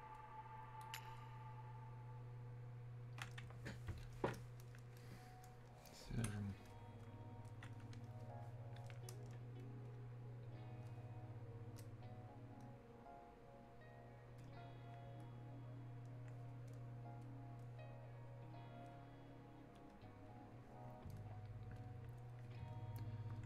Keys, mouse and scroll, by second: 4.2-9.9 alt+drag, 12.2-16.7 drag, 16.7-21.8 drag, 21.8-23.4 drag.